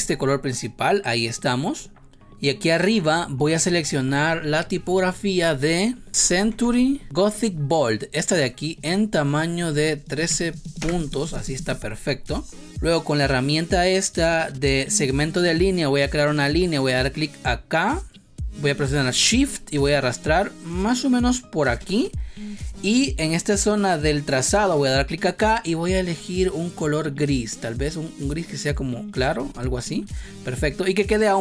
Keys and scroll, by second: 6.0 c, 6.6 t, 7.0 o, 10.2 3, 10.7 Return.